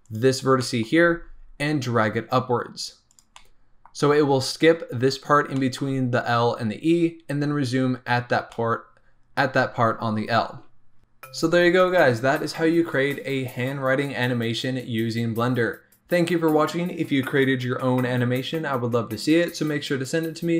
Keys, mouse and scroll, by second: 0.0 click, 0.5 middle click, 0.9 g, 3.3-11.0 middle drag, 11.0 scroll up 2.